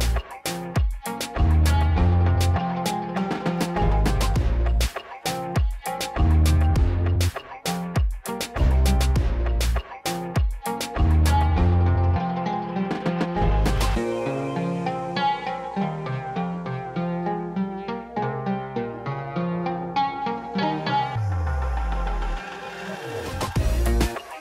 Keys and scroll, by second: 2.0 l, 14.9 t, 15.3 a, 15.6 n, 17.0 Return.